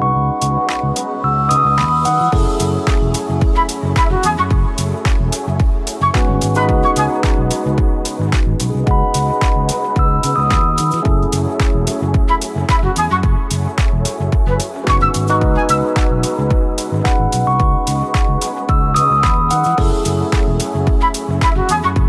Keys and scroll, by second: 1.3 v, 3.1 ctrl+a, 3.8 ctrl+d, 3.9 space, 13.2 b, 18.5 Caps_Lock.